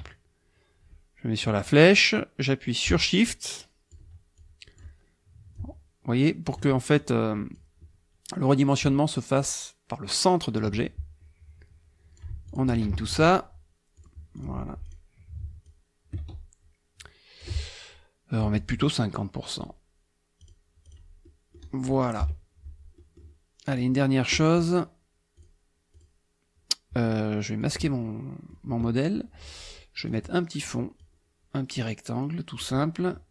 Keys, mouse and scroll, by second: 1.4-4.1 drag, 4.4 shift+click, 5.6-6.7 shift+drag, 7.0-7.7 shift+drag, 9.3-10.8 shift+drag, 11.2 click, 12.5 shift+click, 13.0 ctrl+shift+a, 13.9 click, 14.3 click, 14.8 click, 15.6-17.6 shift+drag, 19.6 click, 20.4 click, 20.8 click, 21.2 middle click, 22.2 KP_Subtract, 23.0 middle click, 23.7 click, 25.4 click, 25.9 click, 27.7 click, 28.1 middle click, 30.1 click, 31.0-32.8 drag.